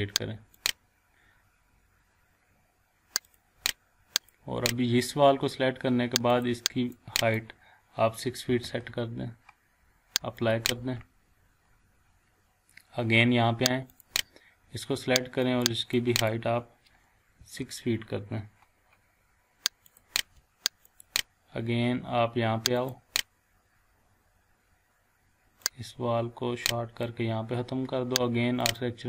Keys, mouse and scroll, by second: 3.2 click, 8.5 6, 8.6 Return, 10.4 click, 11.0-11.3 scroll down 1, 12.7 scroll up 1, 13.9-16.5 drag, 17.4 6, 18.2 6, 20.4 click, 21.7-22.2 scroll down 1, 22.2 scroll up 1, 22.8 click, 25.6-27.2 drag.